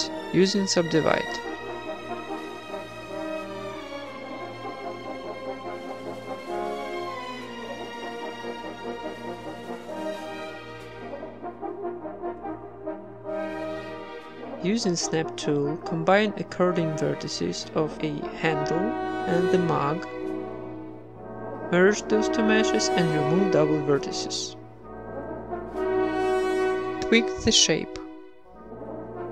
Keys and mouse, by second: 0.2 ctrl+Tab, 1.2 j, 1.6 right click, 1.8 g, 2.7-4.3 right drag, 3.0 g, 3.5 g, 4.3 middle click, 4.5 ctrl+Tab, 4.8-6.2 right drag, 4.9 w, 5.3 ctrl+Tab, 6.4 j, 6.8 g, 7.3 g, 8.0 g, 8.9-10.0 middle drag, 9.7 ctrl+Tab, 10.0 right click, 10.4-14.6 typing, 11.0 middle click, 11.0 right click, 11.3 ctrl+Tab, 11.4 right click, 13.1 click, 13.3 right click, 13.6 middle click, 13.6 right click, 13.7 middle click, 14.2 click, 14.8 middle click, 15.2 Tab, 15.2 click, 15.4 Tab, 15.5 right click, 15.7 x, 15.9 Tab, 16.3 Tab, 16.3 click, 16.8-20.3 typing, 16.9 right click, 17.3 right click, 18.3 click, 18.5 right click, 18.8 ctrl+z, 19.0 click, 19.6 click, 20.2 click, 20.3 middle click, 20.5 Tab, 20.6 right click, 21.0 ctrl+j, 21.1 Tab, 21.7 a, 21.8 a, 21.9 w, 22.4 middle click, 22.8 Tab, 24.6 click, 24.8 middle click, 25.1 z, 26.1 middle click, 26.7 click, 26.8 middle click, 27.3 Tab, 27.9 ctrl+r, 28.2 click, 28.4 right click, 28.6-29.3 typing, 28.9 click, 29.2 Tab.